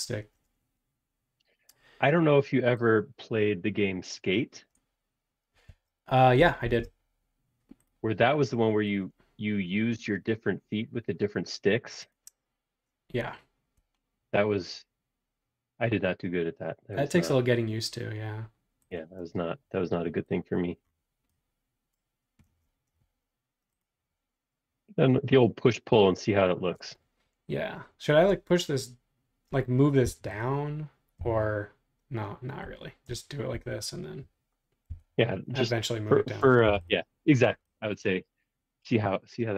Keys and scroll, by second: 5.6 super+z, 6.6 shift+super+z, 19.2 space, 20.0 e, 22.5 space, 30.0 m, 31.2 Caps_Lock, 32.6 Escape, 33.0 space, 34.9 m, 36.4 space, 36.7 p.